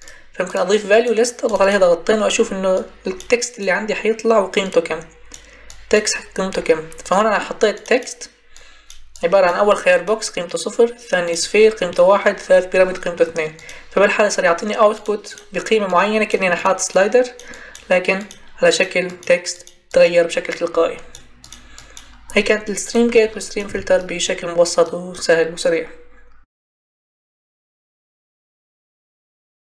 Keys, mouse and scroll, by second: 23.6 Delete.